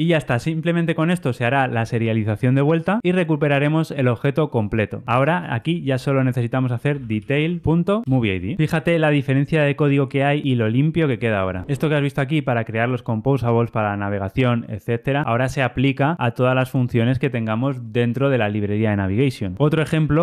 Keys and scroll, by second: 8.0 Return.